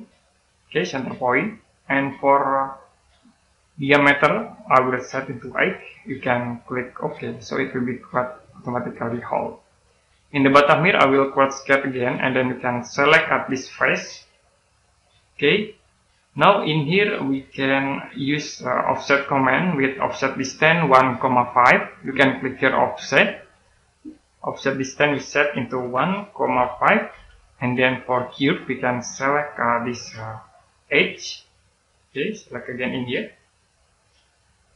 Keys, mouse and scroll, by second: 7.2 click, 9.9-10.6 scroll up 1, 11.8 click, 16.5 middle click, 17.7 right click, 19.2 scroll up 1, 23.0 click, 25.7-27.0 typing, 28.2 click.